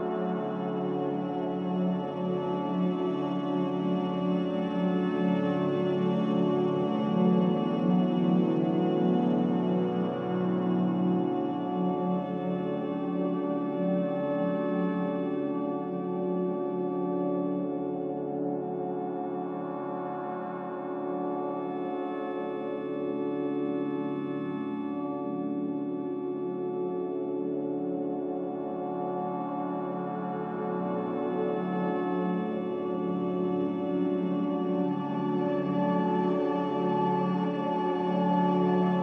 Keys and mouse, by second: 2.7 typing, 5.3 middle click, 6.3-6.9 shift+middle drag, 7.9 alt+shift+click, 8.8-10.1 middle drag, 9.1-10.1 drag, 10.9 ctrl+b, 24.1-30.0 drag, 30.9 click, 31.3 Tab, 32.6 click.